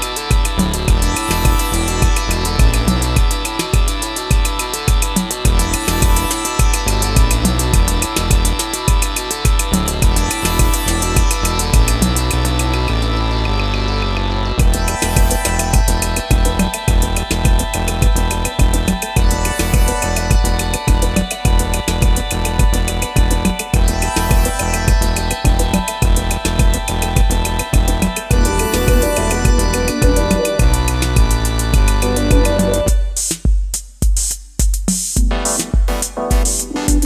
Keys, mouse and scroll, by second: 14.1 double click.